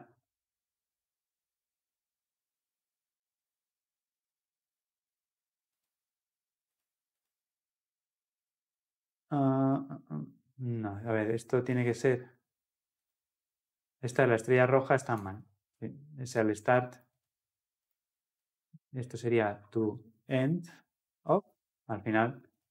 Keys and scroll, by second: 21.4 Tab.